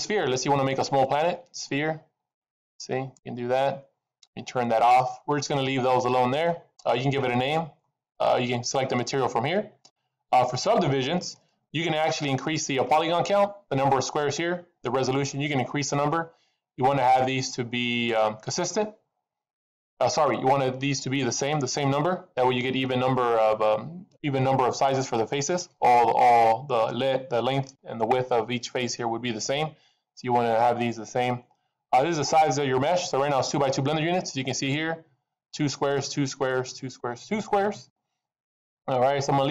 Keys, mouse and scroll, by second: 1.2 click, 1.9-2.3 scroll down 3, 2.2 middle click, 4.8 click, 11.3 middle click, 11.8-12.7 scroll up 3, 12.3 middle click, 12.9-14.1 scroll up 3, 22.2-25.4 scroll down 2, 25.5-26.7 scroll down 2, 33.1-34.3 scroll down 1, 34.3-36.9 scroll down 3.